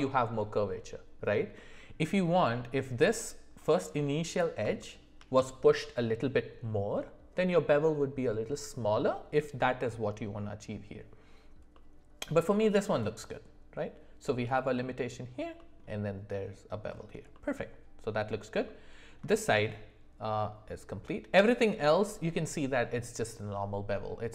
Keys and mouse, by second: 4.4 click, 4.8 shift+middle click, 11.7-14.5 middle drag, 15.5 middle click, 17.3-18.3 middle drag, 18.6 shift+middle click.